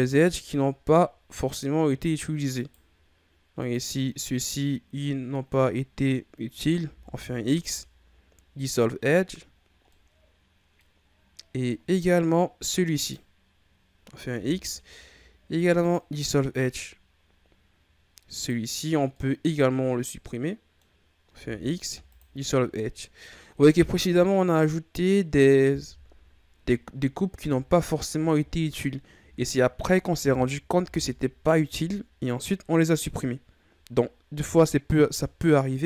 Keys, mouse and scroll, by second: 0.7-1.4 scroll up 3, 1.4 right click, 2.5 shift+right click, 3.6 shift+right click, 6.8 x, 9.5-9.8 scroll down 2, 9.8-11.1 middle drag, 11.1-11.7 scroll up 1, 11.7 middle click, 12.5-12.9 scroll up 1, 12.9 right click, 14.3 x, 18.3 right click, 18.7-19.1 scroll down 1, 19.1-21.3 middle drag, 21.3 x, 23.7-25.8 middle drag, 25.8 KP_1, 26.9-27.4 scroll down 1, 27.4 Tab, 27.9-28.3 scroll down 4, 28.3-28.7 middle drag, 28.7-29.1 scroll up 5, 29.1 Tab, 30.8 KP_1, 35.4-35.8 shift+scroll up 2.